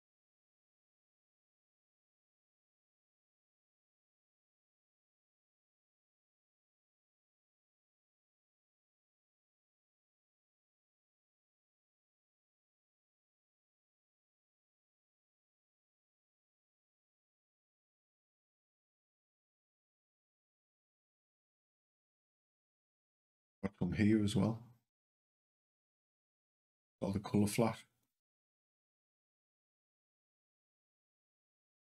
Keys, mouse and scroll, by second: 1.6 c, 11.3 click, 14.3 click, 15.1 Up, 15.6 Up, 17.9 Down, 18.2 Down, 20.2 Up, 27.7 click, 28.7 Down, 29.2 Down, 30.2 Up, 30.4 Up, 31.0 Up, 31.6 Down.